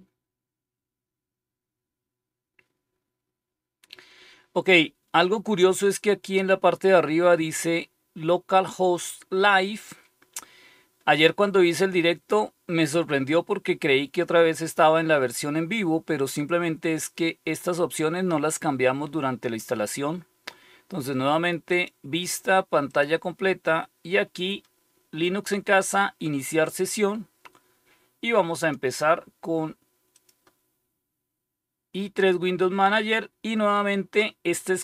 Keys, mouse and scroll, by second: 21.6 click, 22.8 click, 30.1 click.